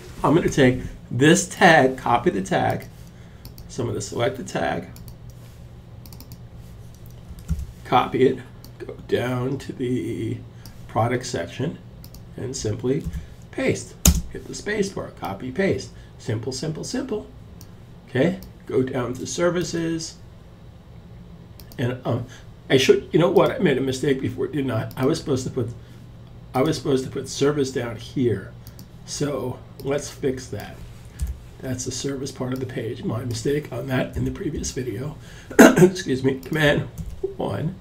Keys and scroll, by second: 8.9 super+c, 12.3 super+v, 13.4 space, 36.3 super+1.